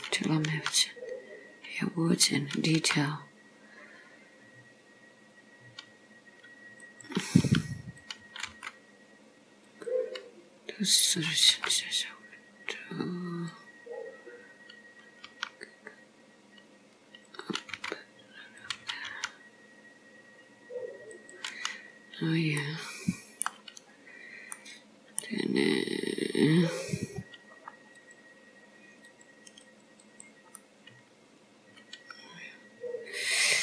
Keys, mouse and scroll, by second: 0.5 r, 2.9 g, 7.4 r, 8.5 g, 11.6 g, 15.3 r, 17.8 g, 19.1 r, 22.6 middle click, 24.0 scroll up 2, 24.6 middle click, 26.9 click, 28.1 click, 29.2 click, 29.7 click, 30.1 click, 30.7 middle click.